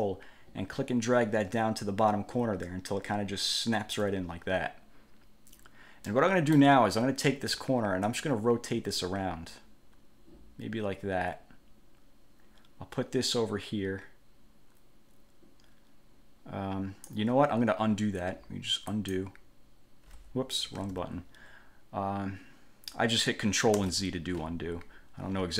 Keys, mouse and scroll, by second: 0.1-4.3 ctrl+drag, 6.3 click, 8.2-17.4 drag, 19.1 click, 20.9 ctrl+z, 23.9 ctrl+z.